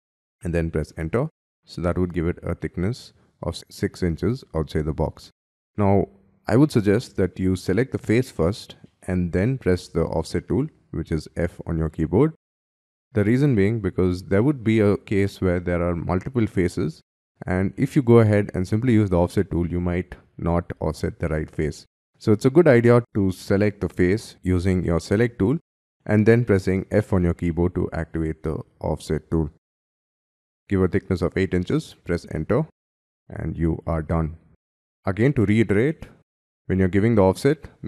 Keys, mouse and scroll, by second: 0.8 Return, 2.2 scroll up 4, 2.6 scroll down 1, 3.2-4.3 scroll up 4, 4.3 scroll down 4, 4.9-6.2 scroll down 7, 6.6 middle click, 7.4 space, 8.4 scroll down 6, 8.7 middle click, 9.9 scroll up 3, 10.2 f, 11.7-13.4 scroll up 3, 13.4 middle click, 15.2 scroll down 4, 15.6-16.8 scroll up 1, 16.8 scroll down 4, 20.0-22.2 scroll up 4, 26.7 f, 30.1 8, 31.2 shift+', 31.6 shift+Return, 33.1 middle click, 34.8 scroll down 3, 35.1 scroll up 4, 35.3 middle click, 35.8 f.